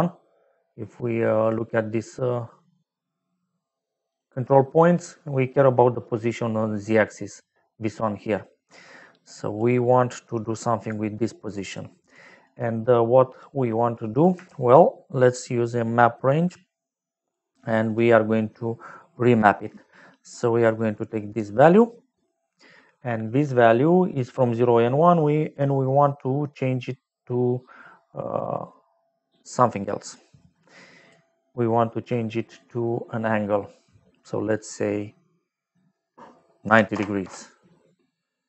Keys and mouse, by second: 1.4 click, 4.0 click, 9.2 click, 9.8 middle click, 10.6 click, 11.2 click, 11.6 click, 12.1 click, 13.2 middle click, 14.0 click, 14.4 shift+a, 17.2 click, 17.8 click, 19.3 click, 21.1 click, 22.1 middle click, 23.6 middle click, 30.3 click, 32.2 middle click, 34.5 click, 36.6 KP_9, 36.9 KP_0, 37.2 Return.